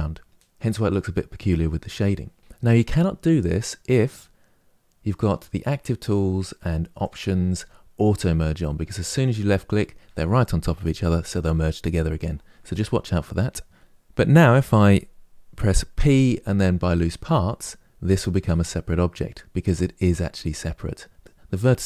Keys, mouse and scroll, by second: 4.8 click, 6.7 click, 15.6 p.